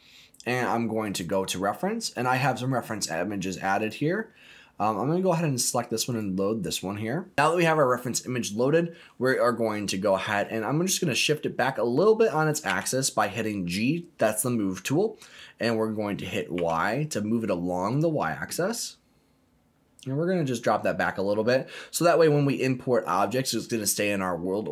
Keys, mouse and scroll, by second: 7.3 click, 9.6 middle click, 10.5-11.2 scroll down 3, 11.2 middle click, 12.6 g, 16.5 y, 20.5 click, 21.2 middle click, 21.7-23.5 scroll up 6, 24.6-24.7 scroll down 2.